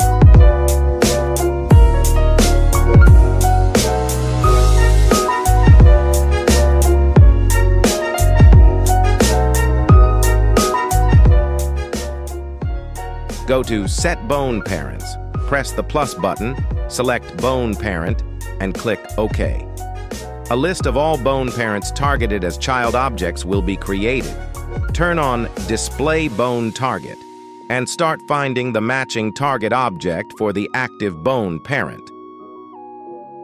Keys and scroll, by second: 23.7 /, 24.7 ctrl+Tab, 29.5 g, 30.1 Escape.